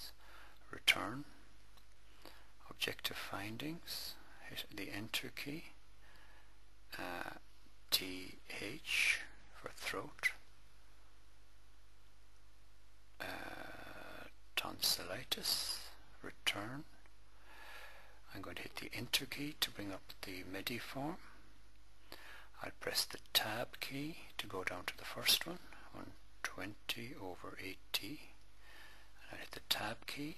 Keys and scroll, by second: 0.6 Return, 3.6 Return, 7.6 t, 8.4 h, 10.1 Return, 13.5 Return, 18.8 Return, 23.1 Tab, 25.3-28.1 typing, 27.0 Tab, 29.6 Tab.